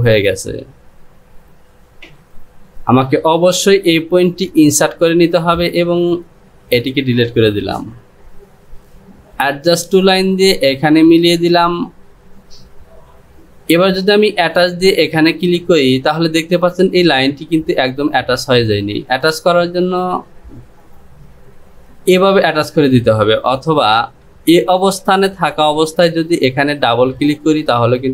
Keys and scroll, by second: 7.6 Delete, 24.6 ctrl+z.